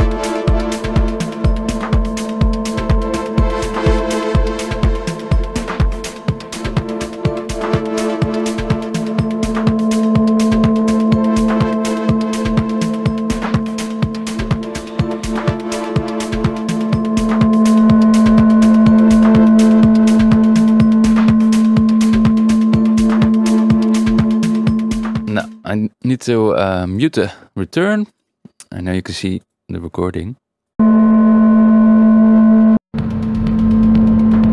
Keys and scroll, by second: 25.1 Tab, 27.1 Tab, 30.7 space, 32.7 space.